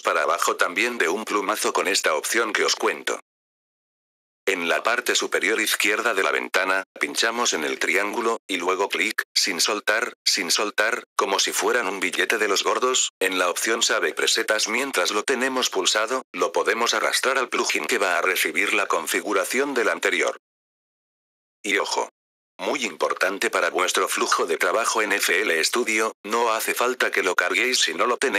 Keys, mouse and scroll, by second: 2.8 click, 3.9 click, 7.4 click, 12.2-21.8 drag, 26.8 click.